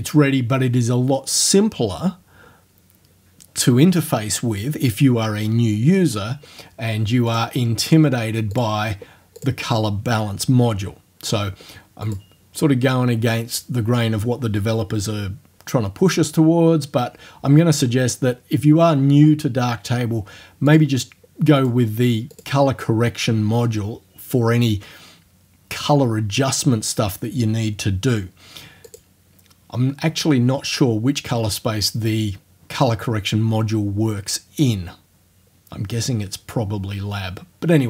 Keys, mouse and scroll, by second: 7.3 click, 8.6 click, 9.4 click, 12.1 click, 20.7 click, 21.6 click, 22.4 click, 28.9 click.